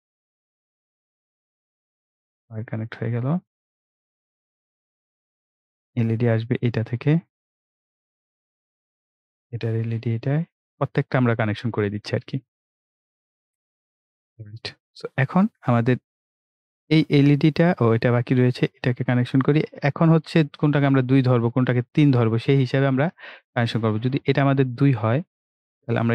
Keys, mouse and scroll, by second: 12.3-13.4 scroll up 1, 13.4-14.4 scroll down 1, 17.9 click, 21.9 click, 22.8-23.2 scroll up 1, 25.6 click.